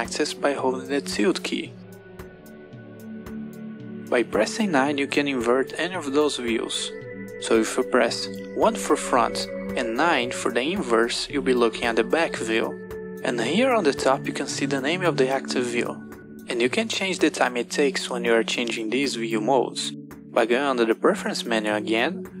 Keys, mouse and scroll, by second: 4.2 KP_9, 8.4 KP_1, 9.6 KP_9, 15.0 KP_7, 16.7 KP_9, 18.2 KP_1, 21.0-22.4 drag.